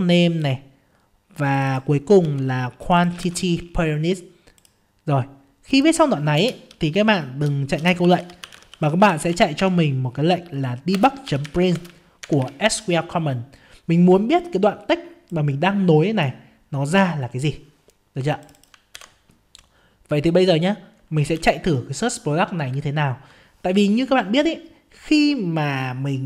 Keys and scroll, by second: 2.2 ctrl+c, 3.2 ctrl+v, 11.7 ctrl+space, 18.9 ctrl+c.